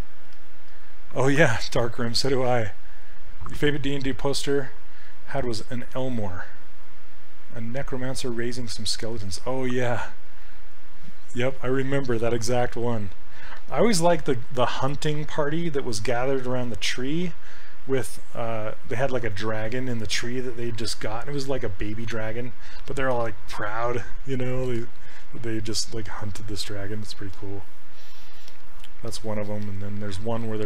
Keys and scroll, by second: 0.3 s.